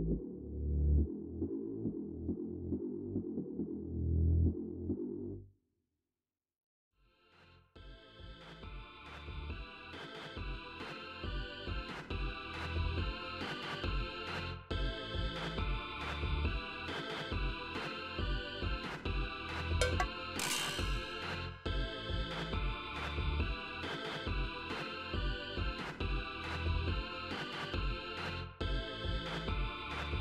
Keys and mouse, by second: 4.1 click, 7.9 click, 8.8-11.0 drag, 14.1 click, 16.6 click, 18.2 click, 19.2-21.3 drag, 23.8 alt+5, 25.1-27.3 drag, 27.6 click.